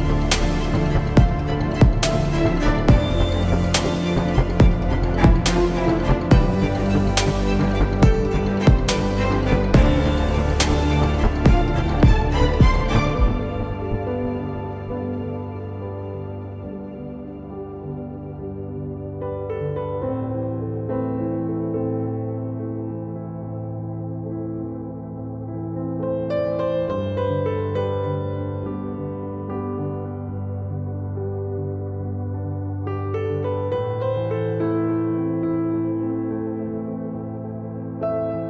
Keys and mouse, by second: 0.6 Tab, 2.6 z, 3.1 z, 3.7 Tab, 4.8 ctrl+Tab, 14.1 s, 15.6 Tab, 17.8 z, 18.6 z, 19.4 z, 21.2 s, 25.7 r, 29.2 r, 31.5 KP_3, 32.9 r, 36.7 s.